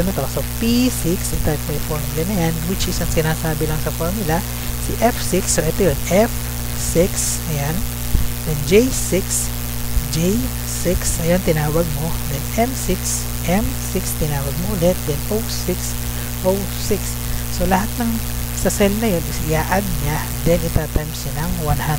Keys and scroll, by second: 1.4 F2, 1.7 ctrl+v, 3.8 BackSpace.